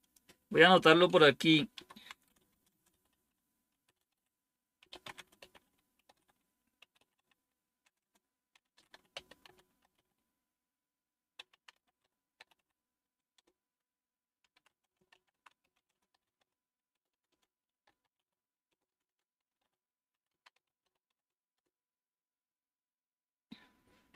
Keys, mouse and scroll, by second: 0.0 click, 1.7-21.6 typing.